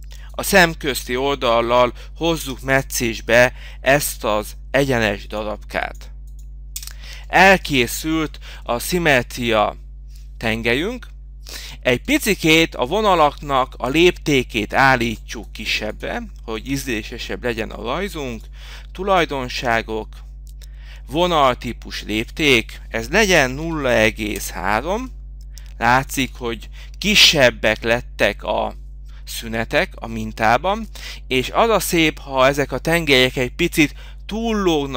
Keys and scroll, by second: 4.3 h, 7.2 Return, 12.3 Return, 25.1 h, 26.9 Return.